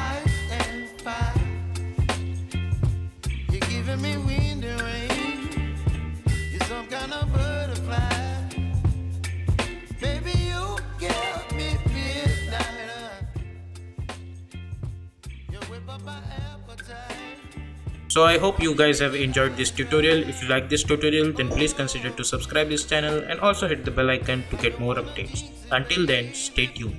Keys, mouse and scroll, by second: 0.9 Return, 1.6-4.2 drag, 4.2-5.0 typing, 12.1 space.